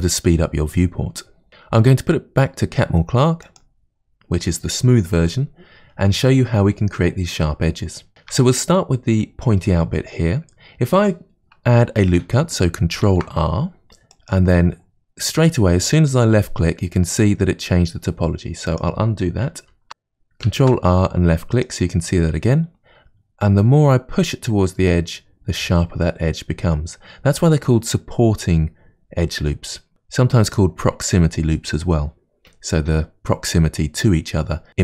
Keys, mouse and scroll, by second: 3.5 click, 8.1-10.7 shift+middle drag, 13.1 ctrl+r, 19.6 ctrl+z, 20.6 ctrl+r.